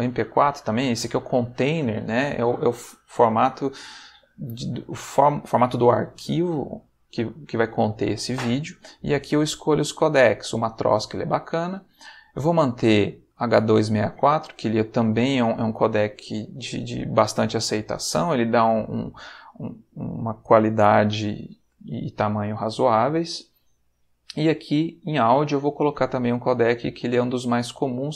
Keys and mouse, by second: 0.5 click, 11.4 middle click, 23.2 middle click, 25.0 middle click, 26.2 click.